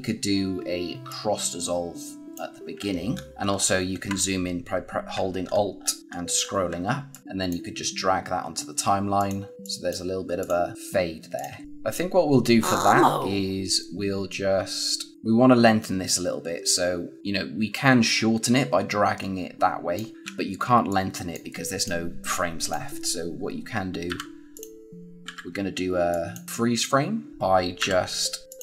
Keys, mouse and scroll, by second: 1.0 click, 2.7 alt+scroll up 1, 3.3 alt+scroll down 1, 4.0-5.0 scroll down 1, 5.4 alt+scroll up 1, 6.7-7.0 scroll up 1, 7.0 click, 15.1 click, 17.2 click, 20.2 z, 20.8 click, 24.0 b, 24.4 click, 25.2 a, 26.0 click, 27.3 click, 27.7 b, 28.4 click.